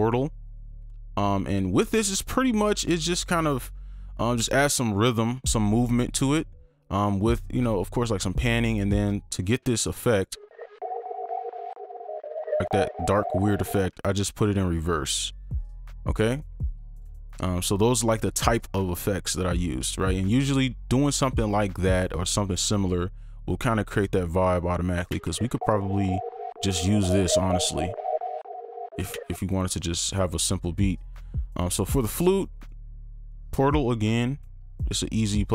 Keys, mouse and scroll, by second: 10.3 space, 13.8 space, 25.1 space, 29.1 space, 31.6 double click.